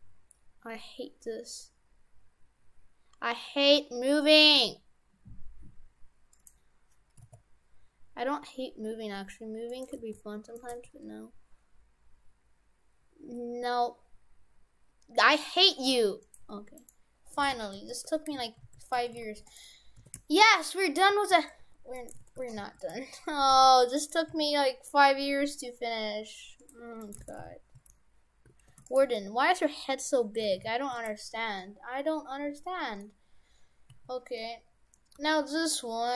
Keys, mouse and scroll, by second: 7.2 s, 10.0 g, 10.7 g, 16.8 right click, 17.5 shift+f, 18.1 Tab, 18.4 shift+f, 19.0 shift+f, 20.1 shift+f, 21.6 Tab, 22.0 right click, 22.2 shift+f, 23.1 Tab, 23.6 s, 24.3 s, 26.8 Tab, 27.0 right click, 27.2 shift+f, 29.0 Tab, 30.0 Tab, 30.5 shift+f, 31.6 middle click, 33.4-34.0 scroll down 1, 34.0 a, 34.6 scroll down 3, 35.2 g.